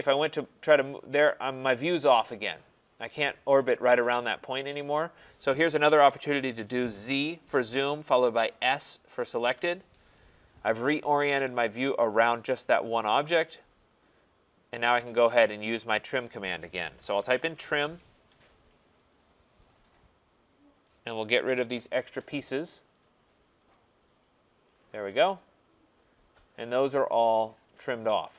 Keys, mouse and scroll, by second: 4.7 right click, 6.9 z, 7.5 z, 8.6 s, 9.4 s, 10.3 scroll, 12.8 scroll, 16.3 right click, 16.9-17.9 typing, 19.6 click, 20.8 click, 21.8 click, 22.9 click, 23.7 click, 24.2 scroll, 28.2 right click.